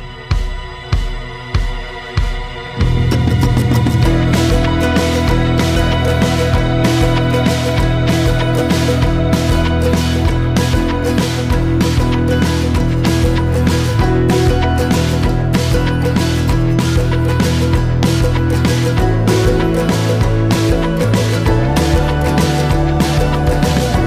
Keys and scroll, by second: 7.2 ctrl+l.